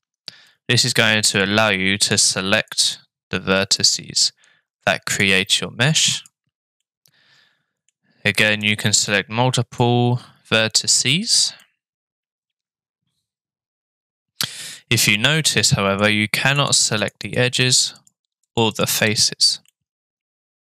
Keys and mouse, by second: 0.5 middle click, 2.6 click, 3.8 click, 5.1 click, 6.2 click, 6.9 middle click, 8.6-9.8 drag, 11.6-14.7 middle drag, 15.4 middle click, 16.6 click, 17.0 click, 18.0 click, 18.5 click, 18.9 click, 19.7 middle click.